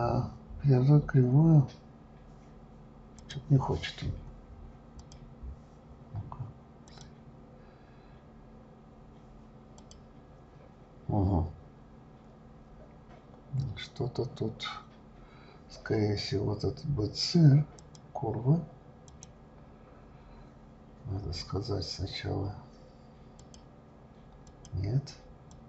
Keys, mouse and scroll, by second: 3.2 click, 5.0 click, 6.9-9.9 drag, 17.7 click, 19.0 click, 23.4-25.6 drag.